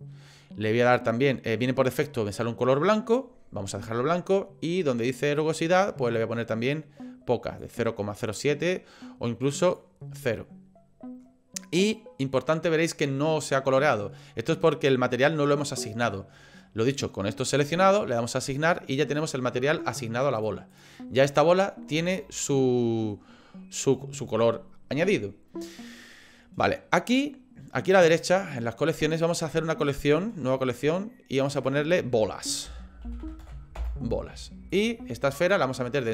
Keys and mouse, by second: 9.7 click, 18.6 click, 20.3 click, 22.1 shift+middle click, 22.6 middle click, 29.3 click, 31.6-34.4 drag, 35.4 click.